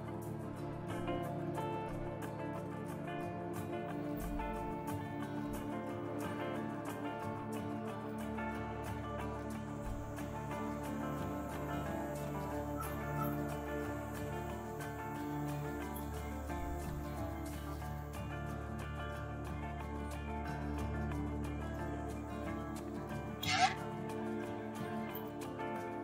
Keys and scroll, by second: 0.9 n, 3.1 Return, 6.3 Return, 11.9 Return, 20.0 s, 25.1 Return.